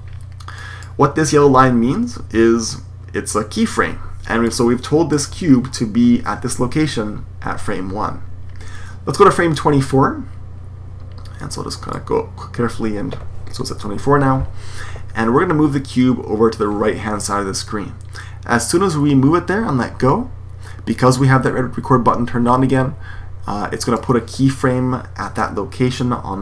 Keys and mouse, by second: 0.5-1.3 drag, 4.5-6.0 drag, 9.4-11.4 drag, 18.7-20.3 drag.